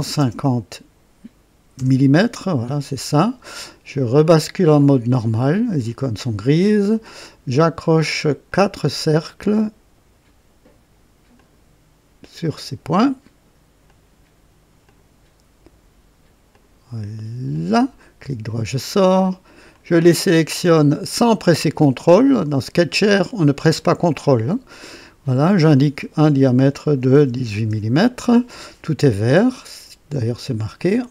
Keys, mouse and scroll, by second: 0.0 KP_5, 0.2 KP_0, 1.7 Return, 4.8 click, 6.7 click, 8.5 click, 9.3 click, 11.3 click, 12.2 click, 13.9 click, 14.9 click, 16.5 click, 17.5 click, 18.2 right click, 19.7 click, 21.5 click, 22.9 click, 24.5 click, 25.6 click, 27.1-27.9 typing.